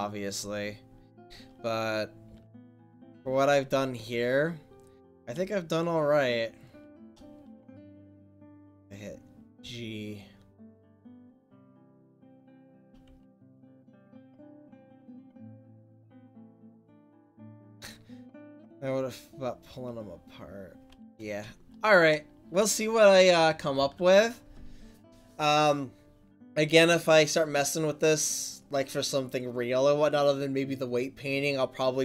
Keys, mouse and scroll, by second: 0.9-2.3 right drag, 2.3 r, 5.1-9.6 right drag, 9.6 g, 19.7-21.6 right drag, 21.9-23.7 middle drag, 23.7 ctrl+s.